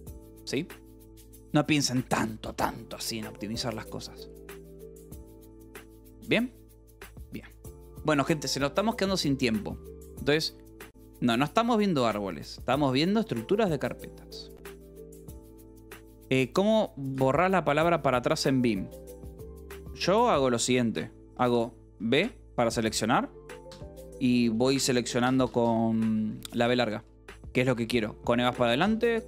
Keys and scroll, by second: 17.8 Escape, 19.0-20.6 typing, 21.8 v, 23.6 b, 26.1 l, 27.6 e, 28.7 b.